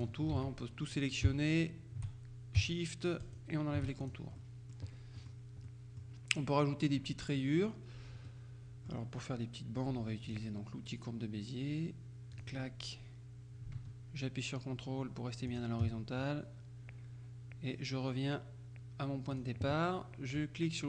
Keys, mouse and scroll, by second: 0.4 ctrl+shift+a, 3.3 shift+click, 4.1 shift+click, 4.4 shift+right click, 5.2 middle click, 5.7 middle click, 8.3 middle click, 8.8 click, 10.3 click, 12.4 click, 15.6 ctrl+click, 19.4 click.